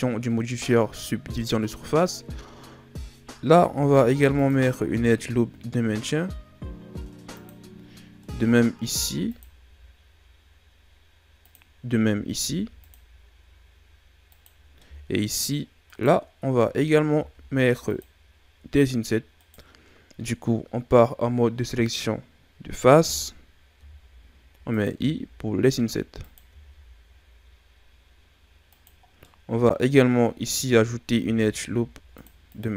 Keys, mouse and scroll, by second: 3.5 ctrl+r, 8.2 middle click, 8.9 ctrl+r, 12.1 ctrl+r, 14.6 scroll down 1, 14.8 middle click, 15.4-15.8 scroll up 1, 15.8 right click, 17.1 ctrl+Tab, 19.3 right click, 23.8 i, 24.9 i, 26.5 i, 29.0 scroll down 2, 29.2 middle click, 30.0-31.0 scroll up 1, 31.0 ctrl+r.